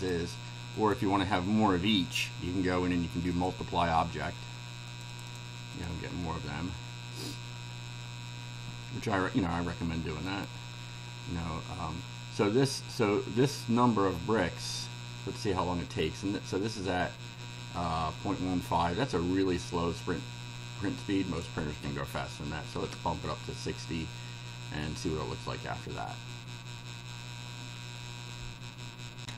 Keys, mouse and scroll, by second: 0.8 right click, 3.4 click, 4.9 click, 5.8 click, 10.3 right click, 14.7 click, 21.0-21.6 drag, 22.7 KP_6, 22.9 KP_0, 29.2 ctrl+r.